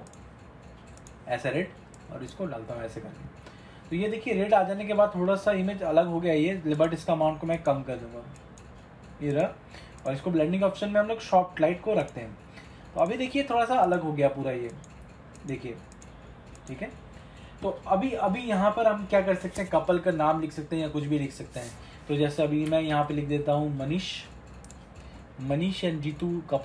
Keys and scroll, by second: 22.8 ctrl+=.